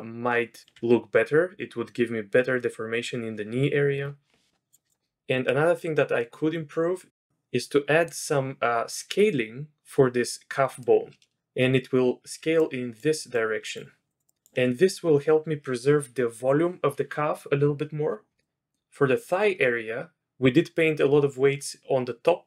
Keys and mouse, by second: 5.4-6.5 middle drag, 6.5-7.1 drag, 7.1 middle drag, 7.6-8.1 middle drag, 10.8-11.4 middle drag, 11.4 d, 12.5-14.6 d, 12.6-14.6 drag, 18.4-18.7 middle drag.